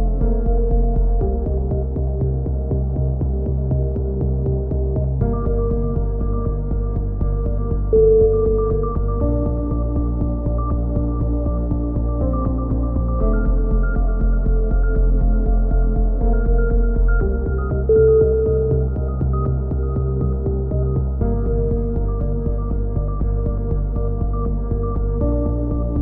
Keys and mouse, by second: 1.1-3.1 drag, 2.5 z, 3.1-4.2 middle drag, 5.9-7.1 drag, 7.1 middle click, 7.5 click, 8.5 middle click, 9.3 KP_3, 10.0 middle click, 10.2-11.8 drag, 11.8 a, 12.9-13.9 drag, 13.7 middle click, 14.2-16.8 drag, 16.2 x, 17.2 a, 17.5 KP_3, 18.0 z, 18.5-19.6 drag, 19.6 middle click, 20.2 click, 20.7 alt+m, 21.4-22.4 drag, 22.2 alt+m, 22.7 a, 23.1 KP_3, 23.5 z, 25.5 b.